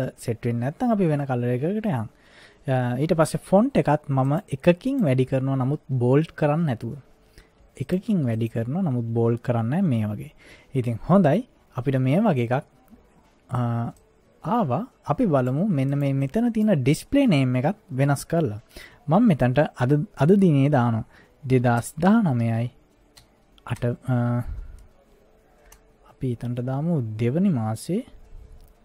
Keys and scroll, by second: 21.3-23.8 typing, 25.7 BackSpace.